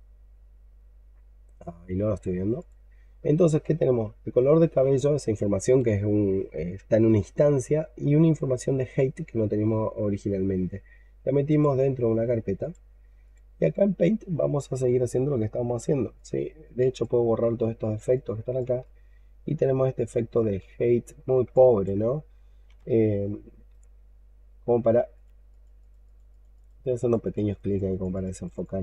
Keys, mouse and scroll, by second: 14.0-17.1 scroll up 2, 17.1-18.6 scroll down 2, 18.7 scroll down 1, 18.7 alt+click, 20.7 alt+middle click, 21.4 alt+click, 22.0-22.6 scroll up 1, 22.7 ctrl+right click, 25.4 double click, 25.7 double click, 25.9 double click, 26.2 double click, 26.4 double click, 26.8 double click, 27.1 double click, 27.3 double click, 27.5 double click, 27.8 double click, 28.0 double click, 28.2 double click, 28.4 double click, 28.7 double click.